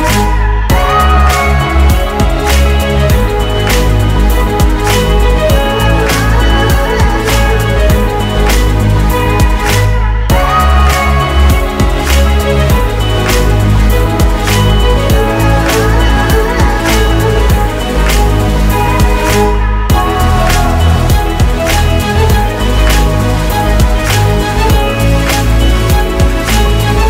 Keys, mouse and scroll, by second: 2.0-3.2 scroll up 1, 11.1 double click.